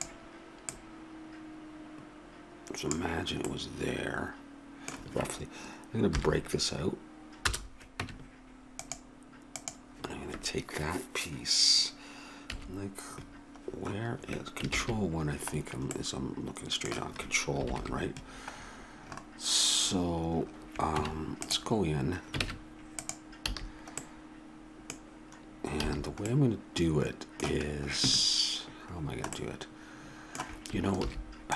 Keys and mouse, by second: 0.7 click, 3.4-6.1 middle drag, 6.1 p, 8.0 Tab, 12.4 KP_3, 14.7 ctrl+KP_3, 20.9 Tab, 22.4 ctrl+Tab, 23.5 a, 25.9 a, 31.0 ctrl+r.